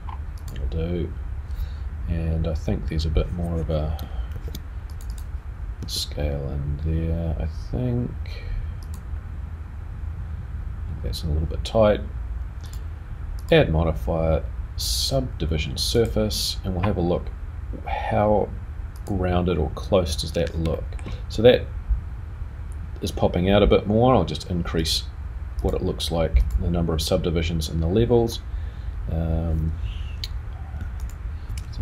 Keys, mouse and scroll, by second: 4.3 ctrl+r, 5.8 s, 12.6 click, 13.4 click, 18.9 click, 20.7 shift+middle click, 24.8 click, 25.6 click, 26.4 click, 31.0 alt+click.